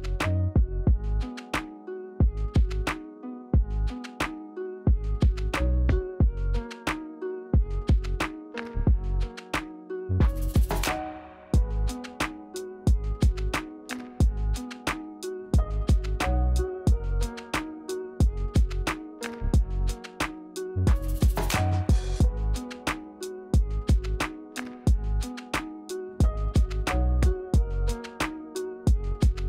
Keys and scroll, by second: 1.2 Tab, 1.9 Delete, 5.7 e, 15.9 Return, 18.7 Return, 19.7 Return, 22.9 w, 24.1 e, 28.1 Return.